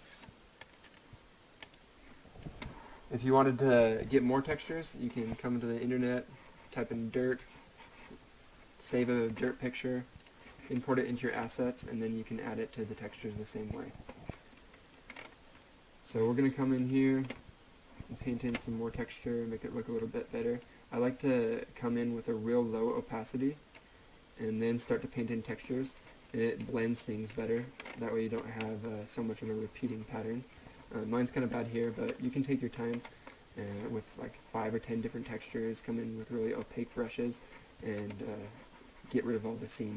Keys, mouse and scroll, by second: 6.0 click, 10.2 click, 14.5 click, 14.8 middle click, 15.1 scroll up 1, 15.5 middle click, 16.8 click, 20.4 click, 21.7 click, 27.8-28.3 scroll up 1, 28.3 scroll down 2, 28.9-29.2 middle drag, 31.5 right click, 32.1 middle click, 33.0-33.3 scroll down 1, 33.3 middle click, 37.9-39.9 scroll up 1.